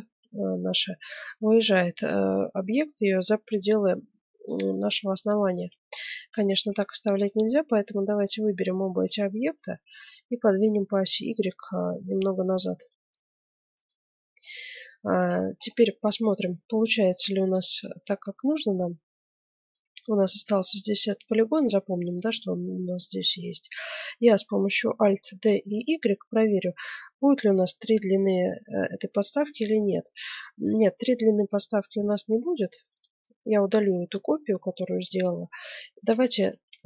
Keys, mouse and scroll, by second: 5.4 middle click, 6.3 Tab, 8.1-9.9 right drag, 9.9 middle click, 10.7-11.7 drag, 13.8 right click, 14.5-17.5 middle drag, 17.7-19.5 right drag, 19.6-22.9 right drag, 25.3 alt+d, 31.9 x, 33.8 middle click, 35.1 right click, 36.1-36.8 right drag.